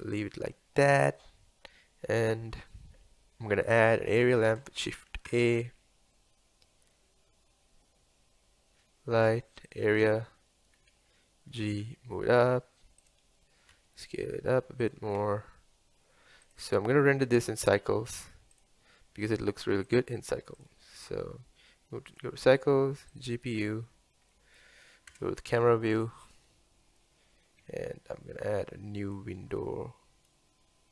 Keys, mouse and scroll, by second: 3.4-9.8 middle drag, 10.8-11.6 scroll up 1, 11.6 g, 13.8 s, 16.5-17.7 drag, 20.7-24.6 drag, 24.6 middle click, 25.4 KP_0, 28.5 n, 29.4-30.9 drag.